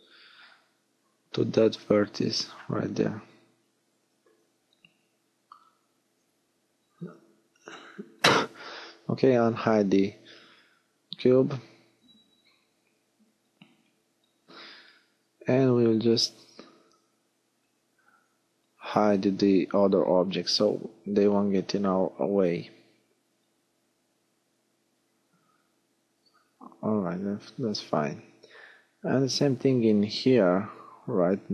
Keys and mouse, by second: 0.1 click, 1.0 click, 1.7 g, 3.5 click, 5.4-6.7 drag, 6.7 alt+h, 7.3 click, 11.3 l, 12.3 l, 14.6-15.9 middle drag, 17.3 h, 26.9-27.9 middle drag, 27.9 g, 30.6 middle click.